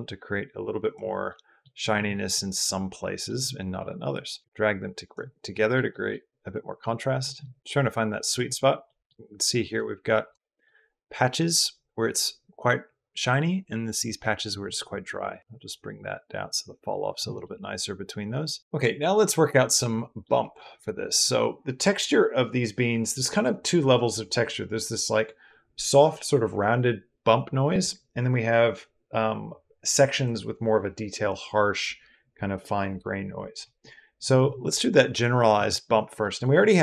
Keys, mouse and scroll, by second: 1.1-1.4 drag, 1.9 drag, 2.4-3.1 middle drag, 4.0 middle click, 5.2-5.6 middle drag, 5.7 middle drag, 6.6-7.0 middle drag, 7.6 middle click, 8.7 middle click, 10.2 shift+middle drag, 14.0 middle click, 15.4-17.1 middle drag, 17.2-18.9 middle drag, 19.1 middle click, 20.2 middle drag, 20.5 middle click, 36.0 middle drag.